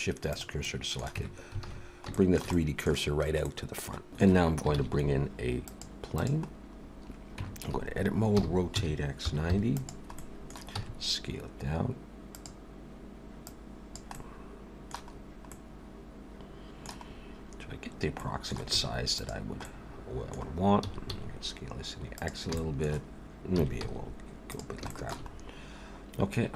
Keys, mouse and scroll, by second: 0.6 middle click, 1.2 Tab, 1.6 alt+a, 2.1 shift+middle click, 2.5 middle click, 3.6 middle click, 4.1 shift+middle click, 4.1 scroll down 1, 4.8 shift+a, 6.8 scroll down 2, 7.4 Tab, 8.4 r, 10.2 middle click, 10.8 s, 13.5 click, 14.1 middle click, 15.1-15.5 scroll up 3, 15.5 middle click, 17.1-17.7 scroll up 1, 18.2 middle click, 18.7 s, 19.6 middle click, 20.8 s, 22.6 shift+middle click, 23.6 s, 24.9 shift+middle click, 25.3-25.8 scroll up 1, 25.8 scroll up 3.